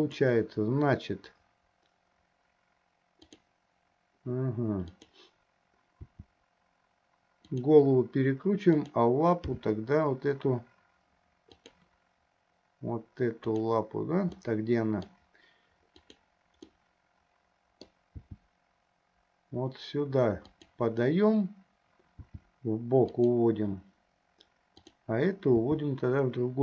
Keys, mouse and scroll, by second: 0.6-1.0 drag, 3.3 click, 6.3 r, 9.1 click, 9.7 g, 14.7 middle click, 16.3 click, 17.1-18.2 middle drag, 18.4 g, 22.6 g, 25.0 click, 25.8 g.